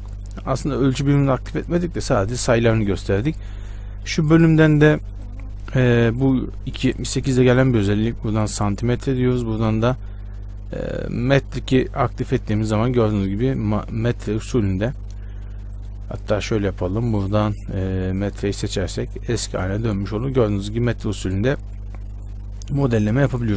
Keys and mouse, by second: 0.4-13.5 drag, 13.5 Tab, 15.9-19.6 drag, 19.6 Tab.